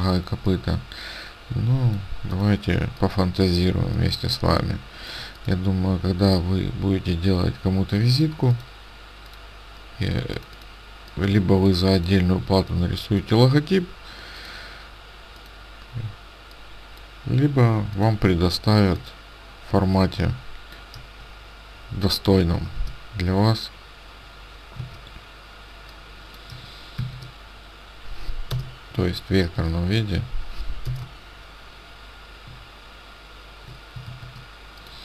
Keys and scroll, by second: 22.7 shift+n, 26.9 shift+a, 28.5 BackSpace, 29.5 shift+a, 31.0 BackSpace, 34.1 shift+a.